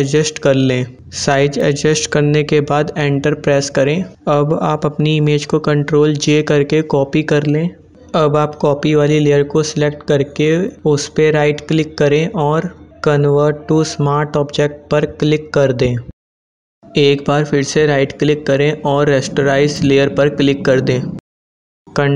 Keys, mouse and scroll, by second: 1.7 Return, 3.0-5.3 drag, 5.3 ctrl+j, 9.6 right click, 13.9 click, 17.6 right click, 21.0 click.